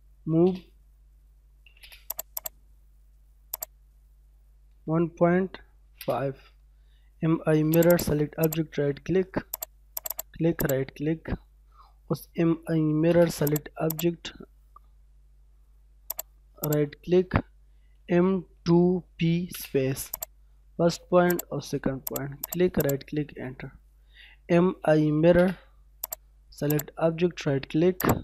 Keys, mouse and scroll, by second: 0.1 ,, 0.2 space, 1.4 m, 1.6 space, 2.1 click, 2.4 right click, 3.5 click, 4.5-7.5 typing, 7.7 click, 8.2 scroll down 1, 8.4 right click, 9.5 click, 10.0 right click, 10.6 click, 11.0 scroll down 1, 11.2 middle click, 12.1-12.8 typing, 13.5 click, 16.6 right click, 17.7-19.3 typing, 20.2 click, 22.4 right click, 22.9 click, 23.3 middle click, 24.5-25.1 typing, 25.4 scroll up 1, 26.0 click, 27.0 scroll down 1, 27.3 middle click, 28.0 right click.